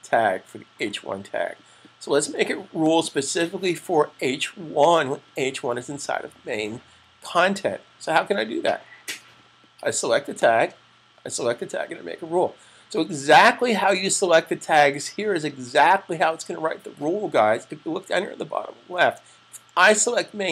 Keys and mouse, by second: 2.7 click, 10.2 click.